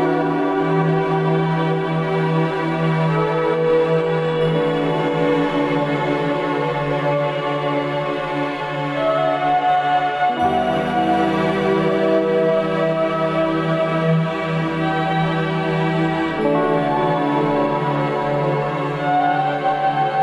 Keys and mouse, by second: 1.9 click, 3.5 middle click, 6.2-7.0 middle drag, 8.1 alt+shift+click, 9.9-10.6 middle drag, 12.0-13.9 middle drag.